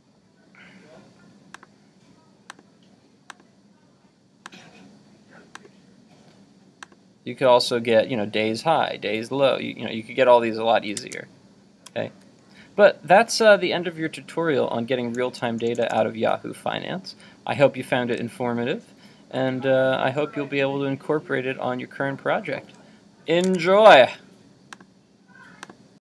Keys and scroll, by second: 11.0 super+Tab, 23.5 super+Tab.